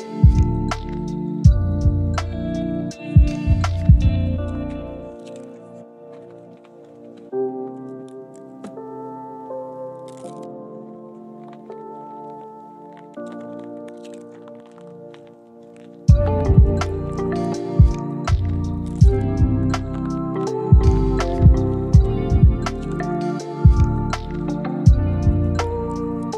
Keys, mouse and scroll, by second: 0.7-1.0 scroll down 1, 1.0-2.0 scroll up 1, 2.4 middle click, 5.1 scroll up 1, 5.2 middle click, 5.6 shift+scroll up 1, 5.8 shift+middle click, 6.8 shift+middle click, 7.6 shift+click, 8.0 middle click, 9.6 middle click, 9.6 u, 10.7 scroll down 1, 10.9 shift+middle click, 13.2 double click, 13.6 u, 14.1 middle click, 16.3 ctrl+click, 16.9 middle click, 17.8 ctrl+click, 18.0 u, 18.3 scroll down 1, 18.5 middle click, 18.9-19.3 scroll up 2, 19.1 shift+middle click, 19.5-20.1 scroll down 1, 20.1 middle click, 21.3 u, 22.5 middle click, 22.7-23.3 scroll up 1, 23.3-23.8 scroll down 1, 23.8 7, 24.3 shift+middle click, 24.5-25.5 scroll up 4, 24.7 shift+middle click, 25.2 shift+middle click, 25.7 ctrl+click.